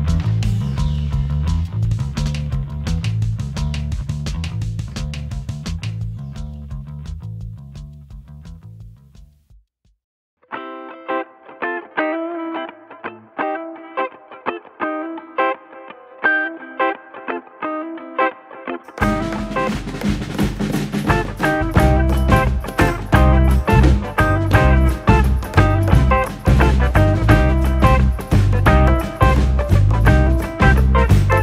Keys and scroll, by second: 5.2 Escape, 10.1 Escape.